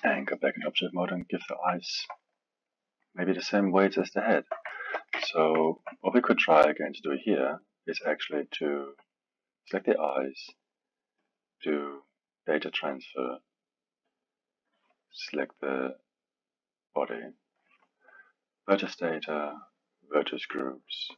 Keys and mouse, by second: 0.4-1.4 middle drag, 1.4 click, 1.8-5.1 alt+middle drag, 5.1 KP_1, 5.7-8.7 alt+middle drag, 10.5-14.2 drag, 18.7-19.6 drag, 20.1-21.1 drag.